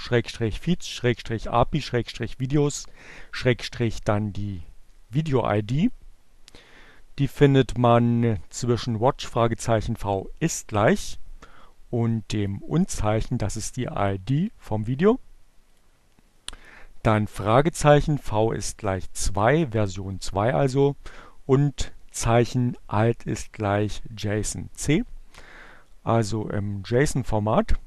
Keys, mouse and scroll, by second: 2.8-5.2 drag, 7.1 click, 10.2-12.5 drag, 15.2 click.